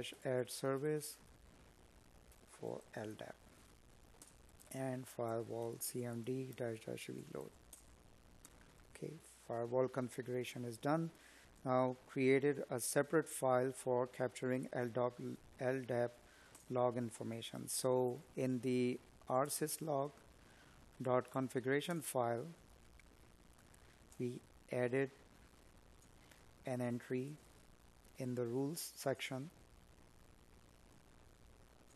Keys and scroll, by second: 0.3 space, 11.7 space, 13.9 Tab, 20.9 Down, 22.3 Down, 22.6 Down, 23.1 Up, 25.9 Down, 26.5 Up, 29.8 Down.